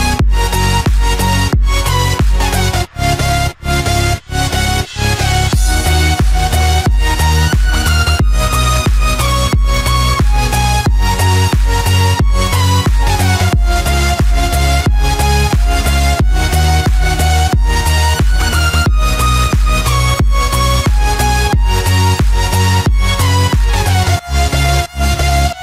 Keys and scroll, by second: 25.0 ctrl+z.